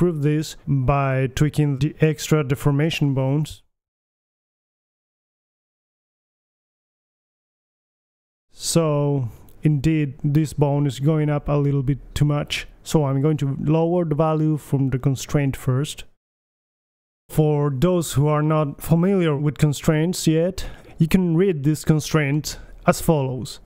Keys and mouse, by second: 3.8-4.7 right drag, 4.7-6.5 middle drag, 4.7 g, 7.8-9.4 right drag, 8.9 g, 9.8 right click, 10.3 middle click, 10.6 g, 10.8-11.4 right drag, 14.1-15.4 right drag.